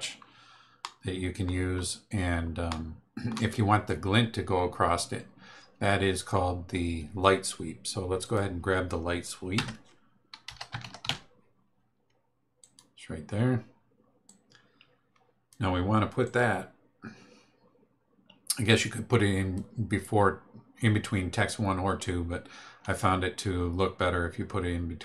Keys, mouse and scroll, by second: 0.0 scroll down 2, 0.8 middle click, 1.6 scroll down 2, 2.7 middle click, 8.2 click, 9.5 Tab, 10.2-11.5 typing, 12.6 click, 14.2-15.7 drag, 16.2-19.7 drag.